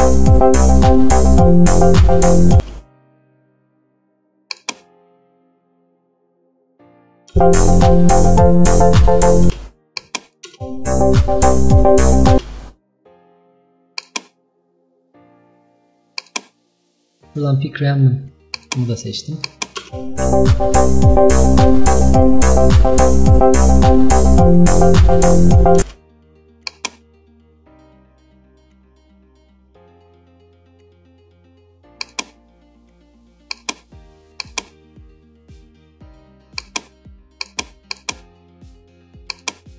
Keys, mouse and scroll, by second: 2.7 space, 4.6-7.4 drag, 7.4 space, 9.6 space, 10.1 click, 10.5 space, 12.4 space, 16.2-19.9 drag, 19.9 space, 25.9 space, 26.8-36.7 drag.